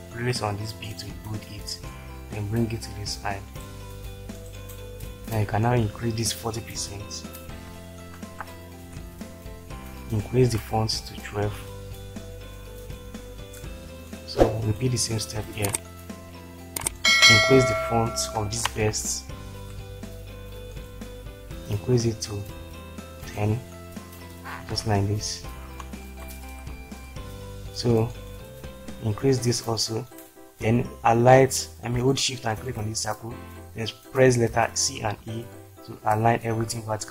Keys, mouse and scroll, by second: 2.2 click, 8.1 shift+Left, 13.4 ctrl+space, 18.6 shift+Right, 24.7 ctrl+space, 26.6-27.0 typing, 34.7-35.0 typing, 36.5 shift+F4.